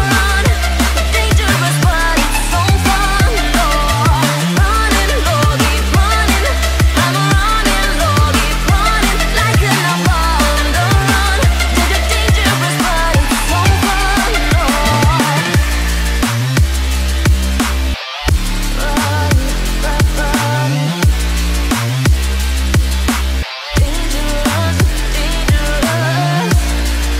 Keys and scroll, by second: 7.3 ctrl+alt+z, 15.6 ctrl+alt+z.